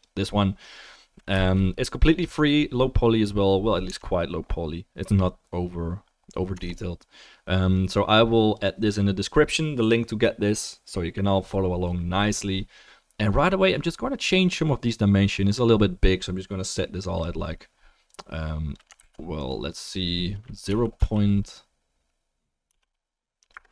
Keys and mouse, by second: 0.0-7.9 middle drag, 4.0 Tab, 6.5 Tab, 7.9-16.6 right drag, 16.6 click, 19.0 ctrl+z.